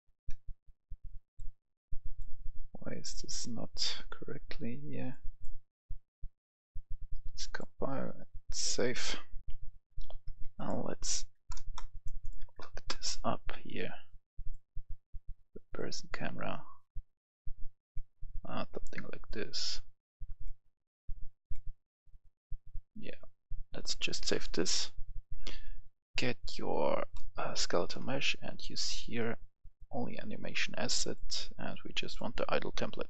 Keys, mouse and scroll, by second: 0.5 click, 9.4 F11, 9.4 F10, 10.5 click, 11.3 KP_0, 11.4 Return, 11.8 click, 12.3 KP_0, 12.6 Return, 14.3-23.7 drag, 27.1 right click, 27.2 a, 28.4-33.0 drag.